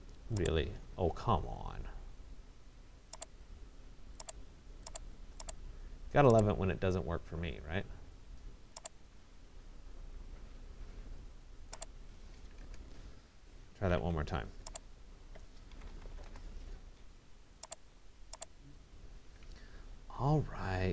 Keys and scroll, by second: 12.2 Return, 13.8 Escape, 16.2 Return, 19.2 Escape.